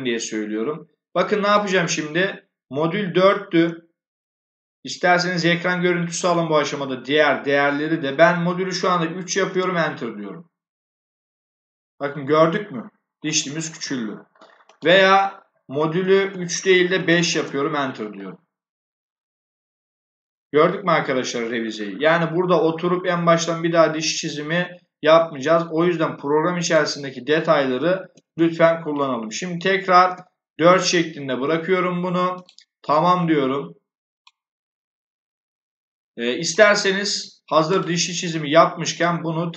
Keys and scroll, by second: 3.2 BackSpace, 8.6 3, 9.4 Return, 15.8 BackSpace, 16.8 5, 17.2 Return, 27.9 BackSpace, 29.3 4, 29.9 Return.